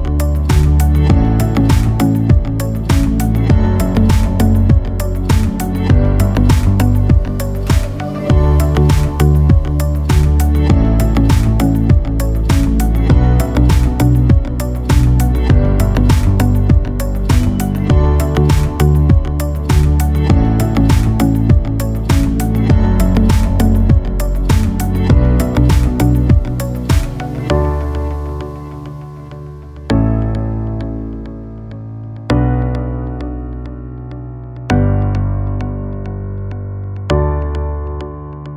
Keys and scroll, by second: 8.0 ctrl+Tab, 8.4 ctrl+KP_0, 8.7 ctrl+KP_Add, 9.6 b, 19.3 b.